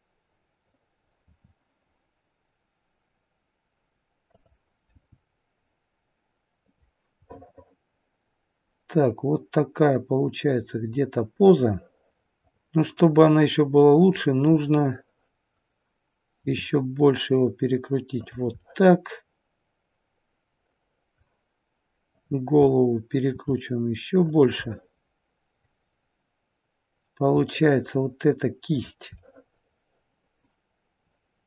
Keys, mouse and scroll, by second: 1.1 r, 4.8 g, 7.2 middle click, 11.4 middle click, 13.9 click, 14.4 middle click, 16.4 r, 18.5 middle click, 22.0 click, 22.6 middle click, 23.3 r, 24.5 middle click, 27.3 middle click, 28.6 click, 29.2 middle click.